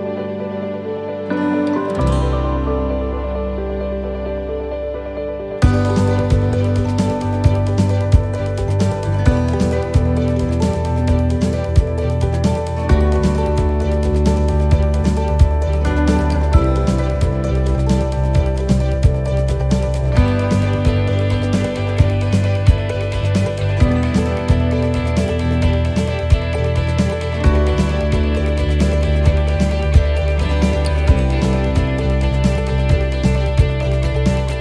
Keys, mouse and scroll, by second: 2.2 click, 2.8 middle click, 4.3 right click, 4.8 shift+right click, 5.8 shift+right click, 6.7 click, 8.4 click, 9.3 middle click, 10.5 scroll down 2, 11.1 middle click, 16.2 shift+middle click, 17.0-17.4 scroll down 2, 17.4 middle click, 18.2 middle click, 18.6-18.9 scroll up 2, 19.0 shift+middle click, 19.7 scroll down 1, 20.3 middle click, 20.3-21.1 scroll down 2, 22.1 scroll up 1, 22.5 middle click, 27.2 right click, 27.2 middle click, 28.5 click, 29.6 middle click, 31.7 click, 32.5 right click, 32.9 shift+right click.